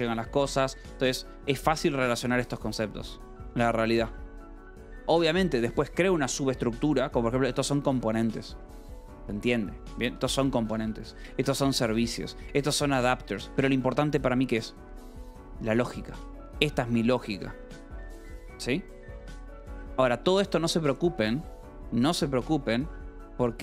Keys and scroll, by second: 6.9 j, 7.6 k, 8.6 shift+v, 9.3 Escape, 10.0 j, 10.5 k, 11.0 Escape, 11.1 j, 11.9 Escape, 12.2 j, 13.2 Escape, 13.4 k, 15.5 shift+v, 16.8 Escape, 17.1 j, 17.9 Escape, 19.1 k.